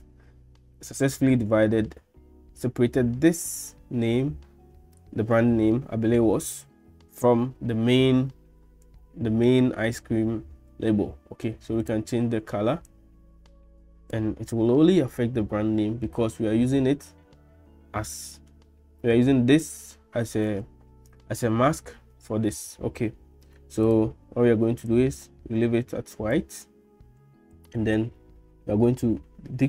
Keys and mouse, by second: 23.9 click.